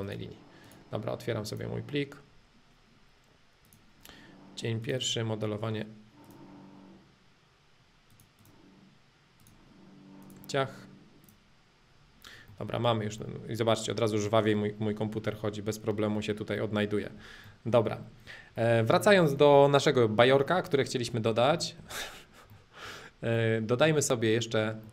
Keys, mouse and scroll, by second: 0.0-2.0 drag, 3.7-5.7 drag, 8.1-10.1 drag, 10.3-12.2 drag, 12.5-15.2 middle drag, 15.2 scroll down 1, 15.4-16.4 middle drag, 16.4 scroll up 1, 16.7-18.0 middle drag, 18.0-18.3 scroll down 2, 18.3 scroll up 2, 18.5 scroll, 18.7-19.8 middle drag, 19.8 click, 20.5-21.5 middle drag, 21.7 shift+middle click, 22.1 scroll, 24.8-24.9 middle drag.